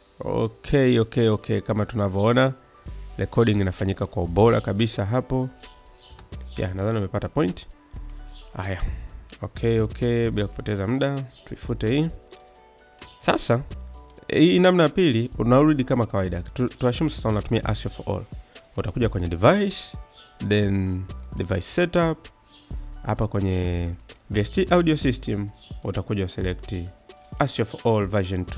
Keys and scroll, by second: 6.0 space, 11.4 Delete.